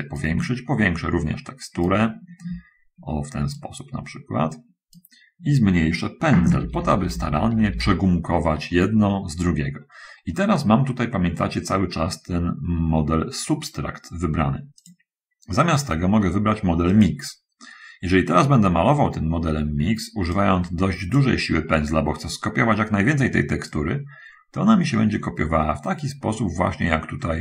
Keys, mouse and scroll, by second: 3.9-5.3 shift+middle drag, 6.9 [, 7.1 [, 17.3 click, 20.7 click, 24.0-27.4 drag.